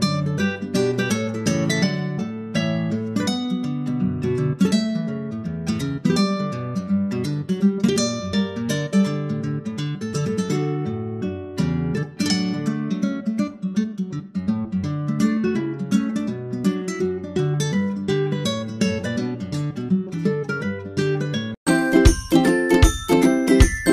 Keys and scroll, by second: 0.5 super+Left, 0.6 shift+super+Right, 0.8 super+c, 1.1 super+v, 4.3 super+Right, 4.7 super+s, 5.9 super+Tab, 6.5 super+Tab, 7.6 ctrl+Tab, 14.9 super+Tab, 15.9 super+Tab.